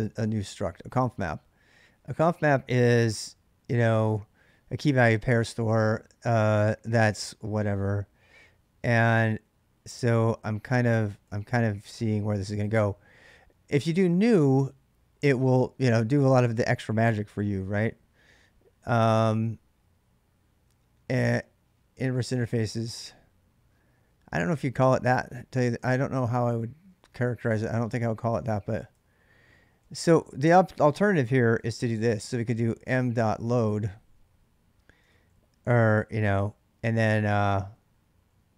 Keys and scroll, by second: 7.5-11.3 typing, 13.4-14.7 typing, 26.8 ctrl+[, 27.7 ctrl+[, 28.1-34.0 typing, 34.9 ctrl+[, 35.1-38.2 typing.